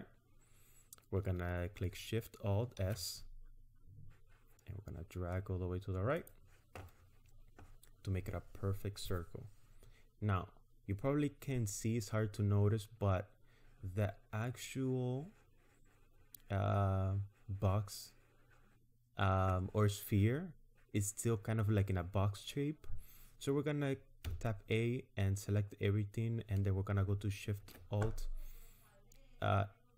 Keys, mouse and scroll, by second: 2.8 alt+shift+s, 24.3 a, 27.6 alt+shift+s.